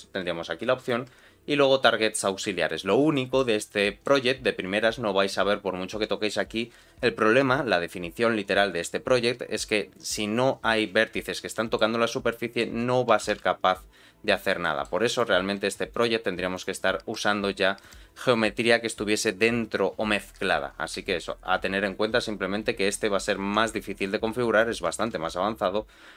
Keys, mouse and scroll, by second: 2.7-3.1 scroll down 2, 3.1 middle click, 3.8 middle click, 5.1-6.0 ctrl+scroll down 2, 11.5 middle click, 12.0 scroll up 1, 12.2 middle click, 13.1 g, 14.6 middle click, 15.1 click, 15.9 click, 16.5 click, 17.8 click, 22.1-23.0 ctrl+scroll down 2, 23.5 ctrl+scroll down 1, 24.0 shift+click, 25.1 ctrl+z.